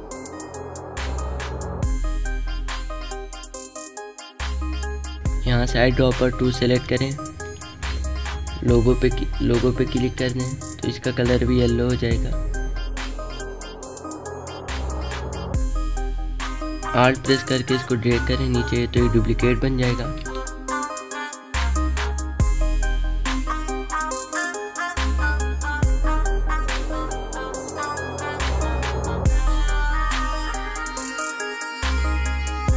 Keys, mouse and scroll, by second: 0.4-2.3 typing, 2.7 click, 3.7 alt+shift+click, 10.8 click, 13.2-17.1 alt+shift+drag, 17.1-19.9 alt+drag, 19.9-21.9 typing, 20.1 click, 21.8 click, 22.1 alt+shift+click, 23.1-24.4 typing, 24.2-25.8 drag, 25.8 alt+scroll up 1, 26.0 click, 26.6-26.9 alt+scroll down 1, 26.9 click, 27.0 alt+scroll up 1, 27.2 click, 27.3 space, 27.5 click, 27.6 shift+click, 28.0 click, 28.9 shift+click, 29.2 click, 30.2-32.7 alt+shift+drag, 32.7 space, 32.7 click.